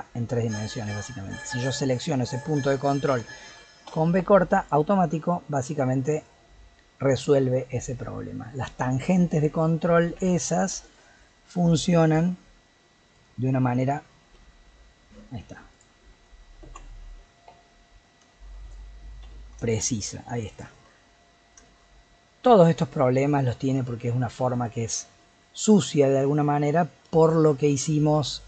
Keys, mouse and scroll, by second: 1.3 click, 3.8 v, 5.4 middle click, 6.0-7.8 scroll down 2, 7.8 Tab, 8.3-10.2 middle drag, 10.2 Tab, 10.5-12.0 middle drag, 12.0 click, 13.1 click, 14.3 g, 16.7 ctrl+z, 17.5 KP_7, 18.3 shift+middle click, 19.2 g, 21.1-21.6 scroll down 2, 21.6 shift+middle click, 21.8 shift+scroll down 1, 22.1-23.8 scroll up 2, 23.8-24.5 scroll up 1, 24.5 Tab, 25.2-25.6 middle drag, 25.6-26.0 scroll down 2, 26.0-28.4 middle drag.